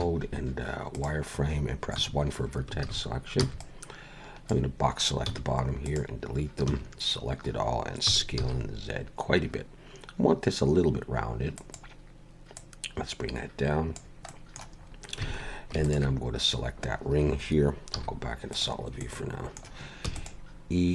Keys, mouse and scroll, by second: 2.0 1, 2.9 alt+a, 3.4 b, 5.3 x, 6.7 a, 8.1 s, 12.5 click, 14.3 middle click, 14.8-15.2 scroll up 3, 15.3 alt+a, 15.8 alt+shift+click, 18.0 z, 19.0 middle click, 20.0 e.